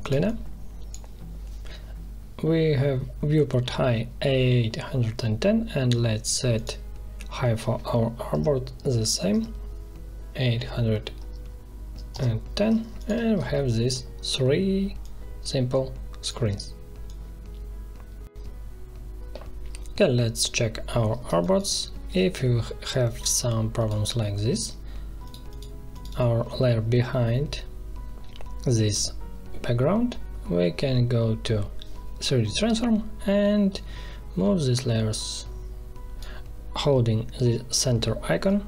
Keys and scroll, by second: 8.3 8, 8.8 1, 9.3 0, 12.1 Return, 21.2 space, 22.1 ctrl+z.